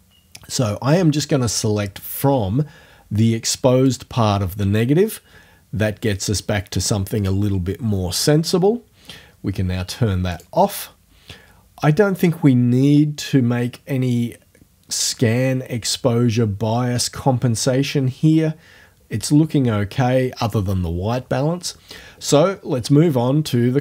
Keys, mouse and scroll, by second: 0.6-4.1 drag, 10.3 click.